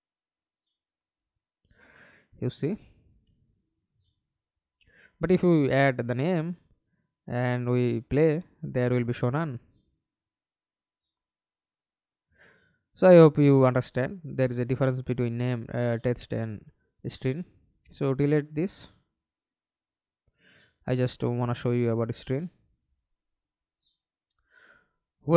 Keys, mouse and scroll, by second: 0.6 alt+p, 1.7 Escape, 1.9 middle click, 2.6 F11, 7.6 double click, 10.6 middle click, 11.4 F11, 11.7 alt+p, 12.9 Escape, 13.3 middle click, 14.0 F11, 19.7 Delete.